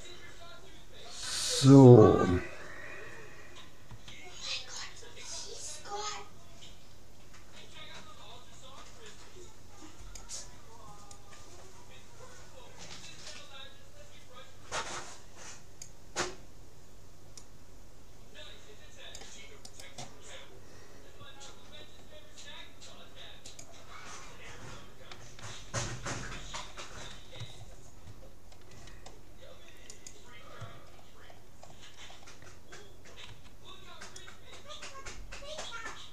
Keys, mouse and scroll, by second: 1.4-3.3 middle drag, 3.9 c, 20.3-22.5 middle drag, 26.6-29.5 middle drag, 30.9-34.1 middle drag, 33.3 c.